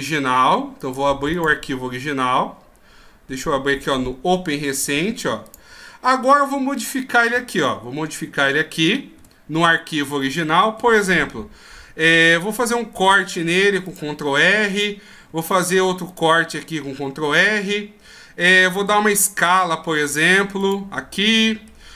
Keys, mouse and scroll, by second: 1.3 ctrl+q.